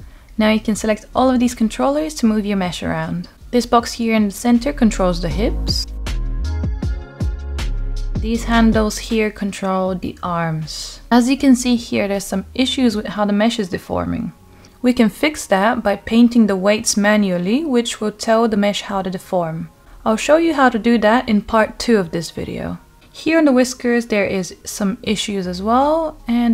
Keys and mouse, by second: 0.9 g, 5.7 g, 7.8 drag, 8.5 click, 9.2-10.2 middle drag, 10.6-11.1 shift+drag, 11.9 g, 16.5 click, 19.1 r, 21.6 click, 22.6 ctrl+z, 23.0 ctrl+z, 24.8-25.3 shift+middle drag, 26.0 click.